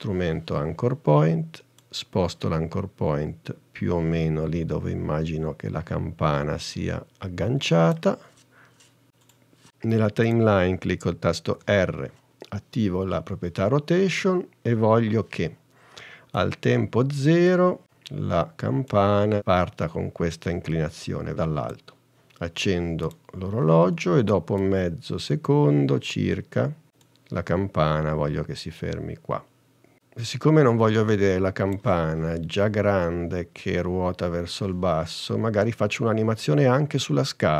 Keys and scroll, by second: 12.0 r.